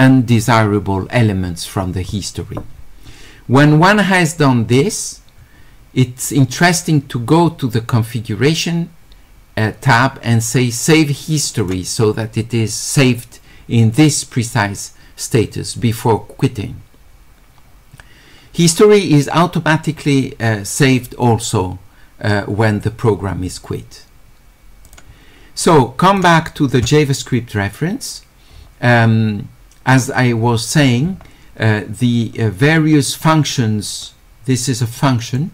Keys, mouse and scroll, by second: 6.7 click, 11.6 click, 24.9 click, 26.1 click, 28.5 middle click, 28.5 scroll up 1, 31.1 middle click, 31.1 scroll up 1, 32.8 middle click, 34.1-35.4 drag.